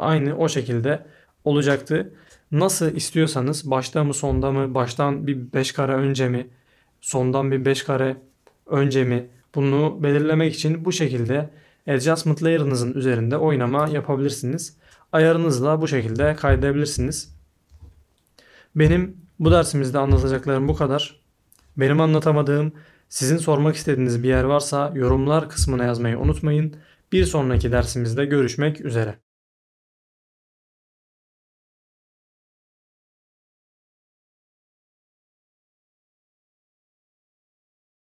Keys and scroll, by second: 17.0 a.